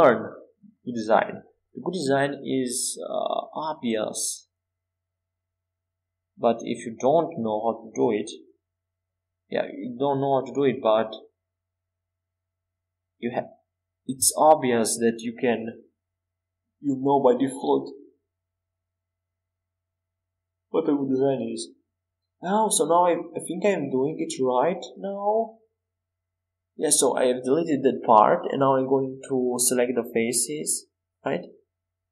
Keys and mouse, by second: 4.8-6.5 drag, 7.0 a, 7.9 c, 9.8 a, 10.6 a, 11.0 a, 11.9 a, 12.6 Tab, 15.7 Tab, 16.8 Tab, 18.5 x, 25.8 Tab, 29.9 z, 30.3 Tab.